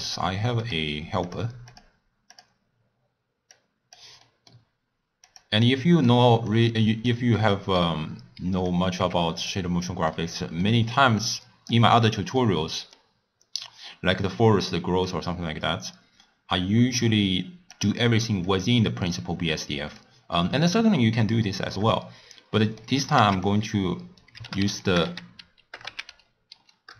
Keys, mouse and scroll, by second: 0.7-3.9 drag, 5.6 click, 6.4 click, 11.2 click, 15.0-26.9 drag.